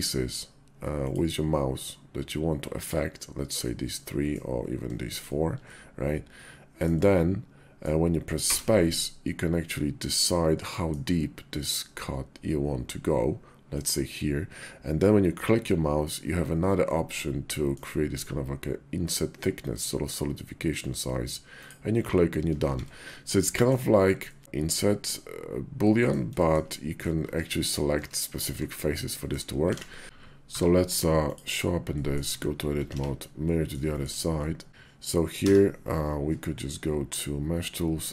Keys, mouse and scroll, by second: 3.4-10.2 drag, 10.2-15.5 middle drag, 21.4 click, 22.4 shift+2, 23.1-23.5 drag, 24.1 shift+click, 25.6-25.9 drag, 26.2 shift+drag, 26.5 click, 27.0 Tab, 27.7 Tab, 28.3 Tab, 28.9 click, 29.5 alt+x, 30.3 q, 31.8 drag, 32.1 Tab, 32.7 alt+x, 33.3 click, 33.7 shift+click, 34.2 click, 34.7 Tab, 35.0 q.